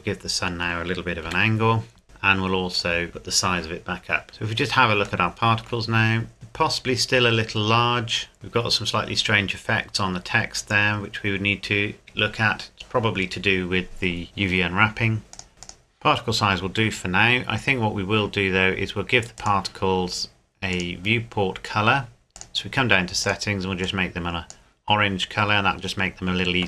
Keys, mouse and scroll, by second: 1.3 r, 2.0 middle click, 2.7 click, 3.1 KP_Enter, 4.3 scroll up 1, 5.3 shift+middle click, 7.1 scroll up 1, 8.4 scroll down 1, 15.3 click, 16.4 scroll down 1, 18.3-19.4 scroll down 1, 19.4 right click, 20.7 click, 25.1-25.5 scroll up 1, 25.9-26.6 scroll down 1.